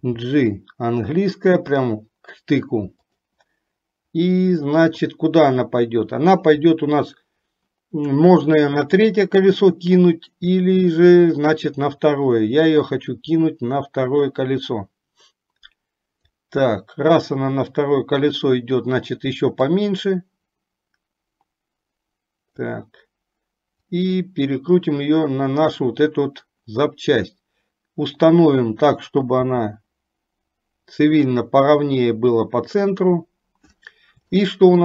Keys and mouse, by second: 0.1 g, 12.9-16.5 drag, 19.7 click, 20.1-23.0 drag, 24.1-26.0 drag, 29.4 g, 34.7 shift+middle click.